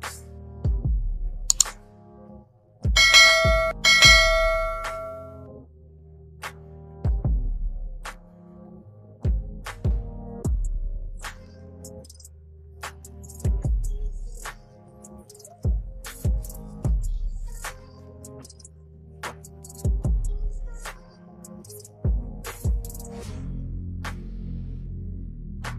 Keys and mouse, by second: 0.1 Down, 0.3 Down, 0.5 Down, 0.5 Down, 0.8 Down, 1.1 click, 2.9 click, 4.6 click, 5.7 click, 6.5 Down, 6.9 Down, 7.0 Down, 7.9 Return, 8.3 Left, 8.7 Down, 9.1 Down, 9.5 Right, 9.7 Down, 9.9 Down, 10.2 Down, 10.7 Down, 11.0 Down, 11.6 Down, 11.7 Down, 11.9 Down, 12.1 Down, 12.4 click, 12.9 Up, 13.1 Up, 13.3 Up, 13.5 Up, 13.7 Up, 14.0 Up, 14.2 Up, 14.4 Up, 15.3 t, 16.0 click, 18.2-19.5 typing, 21.2-22.2 typing, 24.2 click.